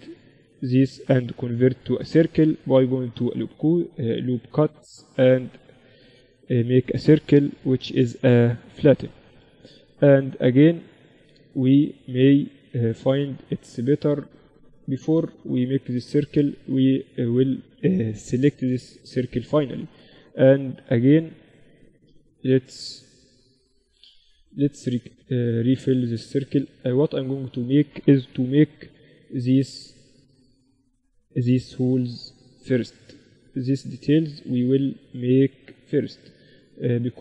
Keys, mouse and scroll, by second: 0.3 a, 0.6-2.3 right drag, 1.0 w, 7.4 t, 8.3 t, 8.9-12.4 middle drag, 8.9 z, 14.0 z, 14.6 Escape, 15.0 ctrl+z, 15.3 ctrl+z, 15.8 Escape, 16.4 a, 16.8 Escape, 17.4 z, 18.0 a, 19.0 ctrl+r, 25.4-28.5 right drag, 27.7 f, 28.5 ctrl+r, 30.9 ctrl+r, 32.6 ctrl+r, 34.4 ctrl+r.